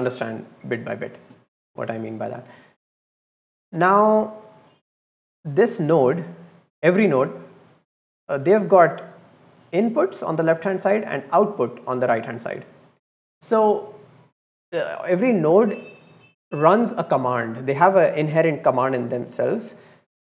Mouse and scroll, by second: 1.5-2.0 drag, 3.6-4.1 drag, 5.3 click, 7.2 middle click, 8.0 drag, 8.6-12.3 middle drag.